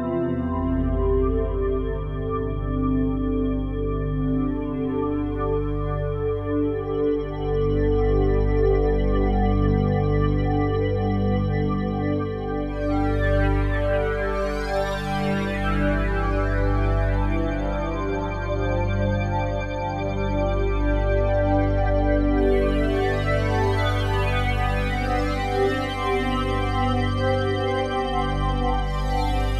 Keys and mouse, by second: 1.0 click, 2.4 click, 3.7 click, 5.0 click, 9.3 Escape, 13.1-14.5 alt+drag, 14.7 ctrl+alt+click, 15.0-16.1 ctrl+alt+drag, 18.2 click, 19.2 click, 19.8 click, 20.7 click, 21.7 click, 22.8 click, 24.3 ctrl+alt+click, 24.9 click, 25.6 alt+click, 26.4 Tab, 27.7 Tab.